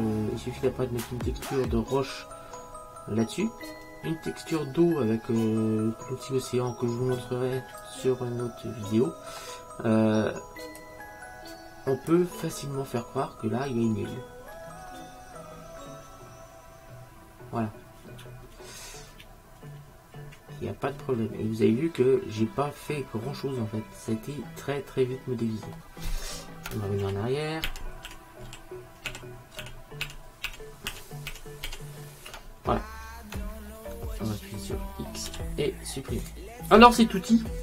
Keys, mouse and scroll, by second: 1.2 middle click, 1.8-3.6 middle drag, 6.6-7.3 scroll down 1, 7.3-9.6 middle drag, 10.9 click, 12.6-14.7 middle drag, 15.0-17.0 middle drag, 27.6 ctrl+z, 28.2 ctrl+z, 28.8 ctrl+z, 29.3 ctrl+z, 29.8 ctrl+z, 30.3 ctrl+z, 30.6 ctrl+z, 30.7 ctrl+z, 31.0 ctrl+z, 31.4 ctrl+z, 31.8 ctrl+z, 35.4 x.